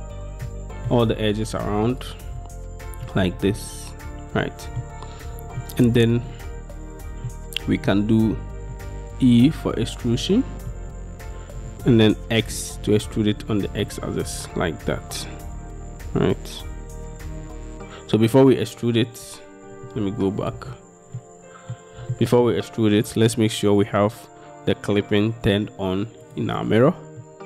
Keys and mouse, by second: 0.6 middle click, 3.1-4.9 middle drag, 5.7 middle click, 7.4 middle click, 8.8-10.8 middle drag, 11.7 e, 12.7 x, 18.3-19.8 middle drag, 20.1 ctrl+z, 21.3 middle click, 22.2 shift+middle click, 26.3 click, 27.3 click.